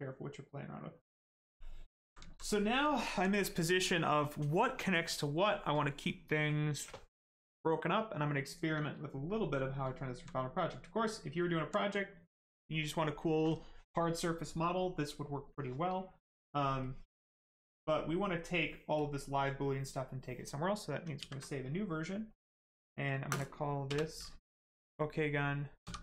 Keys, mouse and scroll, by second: 1.0 shift+right click, 1.6 alt+right click, 9.1 right click, 9.9 alt+right click, 10.7 right click, 10.7 right click, 16.8 click, 18.9 click, 21.1 s, 22.3 click, 23.8 BackSpace.